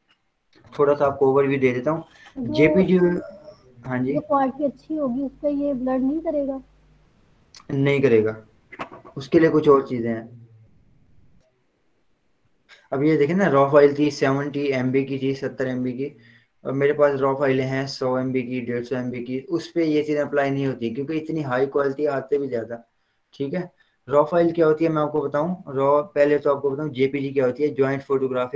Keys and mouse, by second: 1.2 v, 2.8-5.9 drag.